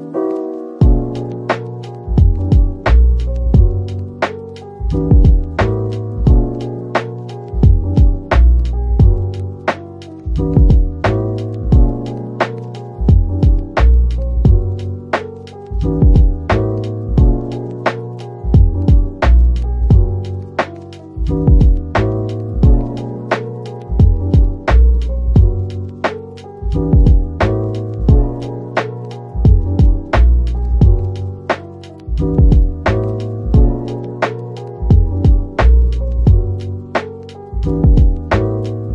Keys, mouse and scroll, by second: 3.4 middle click, 3.9 Tab, 4.5-4.8 scroll down 1, 4.8 middle click, 13.9 /, 16.2 middle click, 17.9 Tab, 19.7-20.5 typing, 22.0 typing, 22.8 right click, 26.0 double click, 26.8-29.1 typing, 30.4 typing, 33.1 typing, 34.0 alt+shift+click, 35.6 ctrl+b, 38.3 Tab, 38.8 middle click.